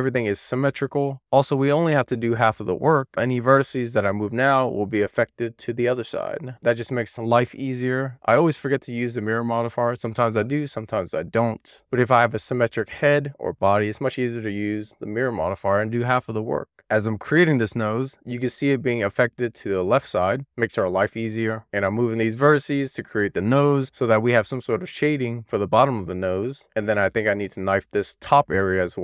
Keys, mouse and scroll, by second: 0.0 click, 1.7-3.0 middle drag, 3.2 alt+z, 4.1 alt+z, 4.5 alt+middle click, 5.5 alt+middle click, 6.8-7.4 scroll up 2, 7.4-9.2 middle drag, 9.7-14.1 middle drag, 14.8 alt+z, 15.7 alt+z, 16.4 alt+middle click, 17.0 Tab, 17.2 alt+q, 17.6 Tab, 18.0 click, 18.5 middle click, 19.1 Tab, 19.5 Tab, 19.8 middle click, 20.3 Tab, 20.5 Tab, 21.0 alt+q, 21.5 Tab, 21.7 click, 21.9 middle click, 22.0 click, 22.3 scroll up 3, 22.5 click, 22.7 middle click, 23.0 k, 23.4 middle click, 24.7 click, 25.2 middle click, 25.4 click, 25.5 middle click, 25.7 alt+z, 25.9 middle click, 27.1-28.3 middle drag, 28.6 k.